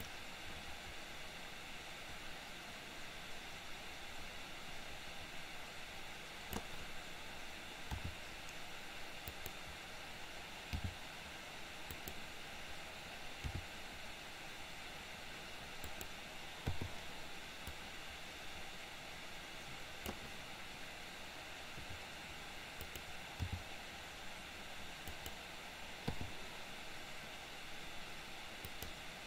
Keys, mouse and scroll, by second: 0.2-6.8 drag, 8.0 r, 10.8 g, 13.5 r, 16.8 i, 17.8-20.3 drag, 21.9 r, 23.4 g, 26.3 i, 28.8 click.